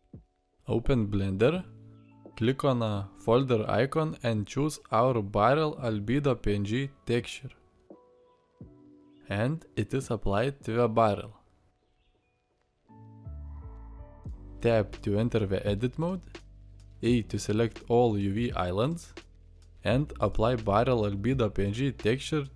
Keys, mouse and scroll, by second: 2.3 Tab, 11.6 Tab, 12.2-14.5 drag, 16.5 Tab, 19.2 a.